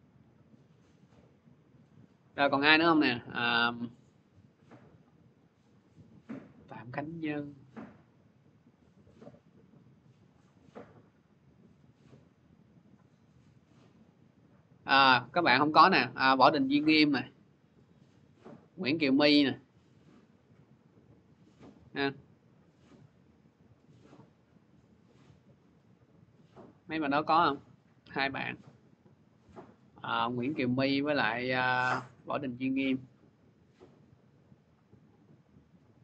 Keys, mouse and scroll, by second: 2.2-2.5 scroll down 3, 3.1 click, 4.4 scroll, 5.2 click, 5.9 scroll, 7.4 click, 7.4 scroll down 2, 12.0 click, 13.0 click, 13.5 click, 13.6 x, 13.9 click, 14.8 scroll down 2, 16.9 click, 17.3-17.7 scroll, 17.7 click, 19.5 scroll, 24.8 click, 25.6 click, 27.6 scroll down 2, 28.4 click, 28.5 scroll, 29.3 click, 31.1 scroll, 32.7 click, 33.8-35.3 scroll.